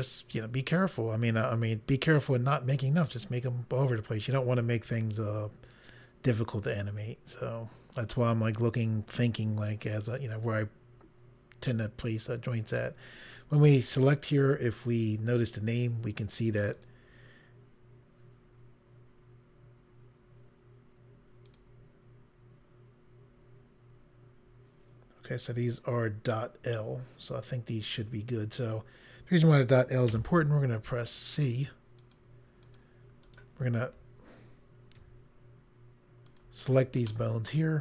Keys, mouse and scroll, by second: 14.0 click, 16.7 click, 21.5 click, 30.1 c, 30.9 click, 32.0 click, 32.7 click, 33.3 right click, 36.3 shift+click, 37.1 middle click.